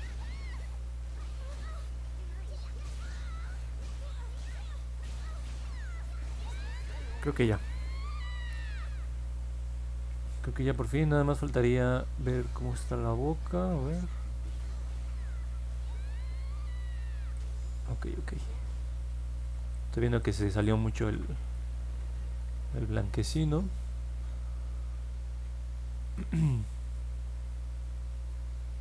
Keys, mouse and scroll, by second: 0.2 click, 0.5 click, 0.9 click, 1.3 click, 1.7 click, 2.0 click, 2.3 click, 2.6 click, 4.2 click, 4.7 click, 5.4 click, 5.7 click, 5.9 click, 8.6 scroll down 1, 10.0 scroll up 1, 10.7-17.3 alt+drag, 17.5-18.1 scroll down 2, 18.9 alt+middle click, 19.7 alt+click, 20.6 alt+middle click, 21.5 alt+middle click, 22.4 middle click.